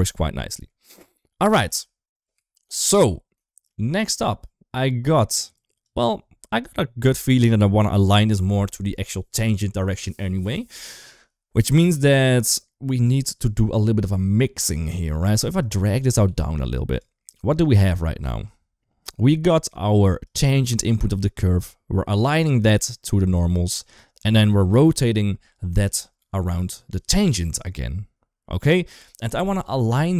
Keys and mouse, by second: 0.4 Up, 0.8 KP_1, 1.5 ctrl+s, 3.3 shift+middle click, 5.4 click, 6.6 shift+middle drag, 12.7 click, 14.9 g, 15.9 click, 16.1 g, 17.3 click, 17.6 click, 18.1 shift+middle click, 20.1 click, 24.3 shift+middle click.